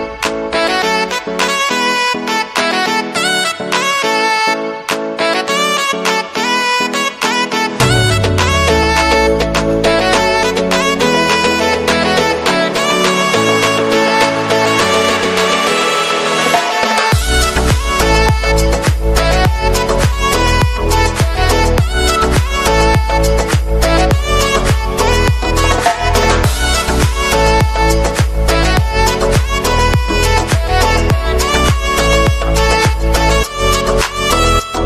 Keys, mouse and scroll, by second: 0.4 right click, 1.7 right click, 2.3 right click, 2.5 right click, 2.7 right click, 3.2 right click, 3.3 right click, 3.8 right click, 4.7 right click, 5.3 middle click, 5.6 right click, 15.8 right click, 21.6 right click, 26.3 right click, 28.1 right click, 29.9 right click, 33.6 right click, 34.1 right click.